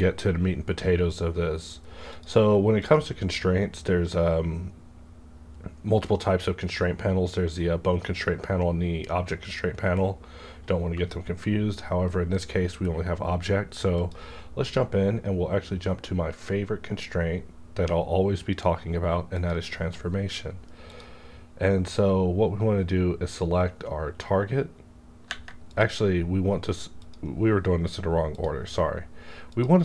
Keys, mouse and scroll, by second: 2.1 click, 2.7 click, 14.0 click, 19.3 click, 25.7 click.